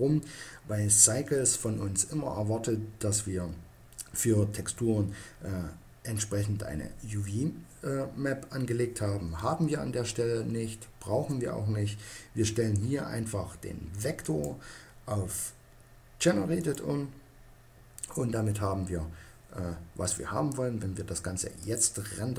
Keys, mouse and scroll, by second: 14.1-15.8 drag.